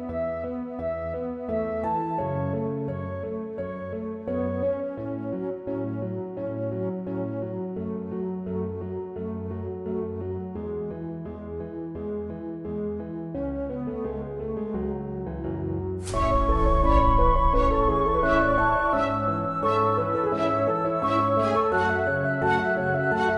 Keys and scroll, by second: 0.3 ctrl+w, 2.8 ctrl+w, 8.3 2, 9.6 3, 12.2 Delete, 12.4 Delete, 14.5 BackSpace, 14.6 BackSpace, 15.0 Return.